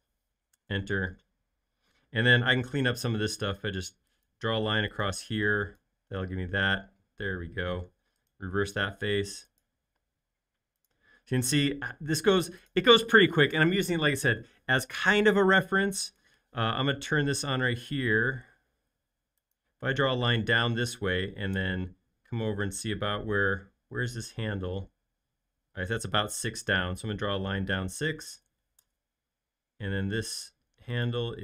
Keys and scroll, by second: 0.0-0.5 typing, 0.5 Return, 3.2 typing, 5.2 e, 7.7 space, 15.6 l, 28.4 6, 28.8 Return, 29.8 l.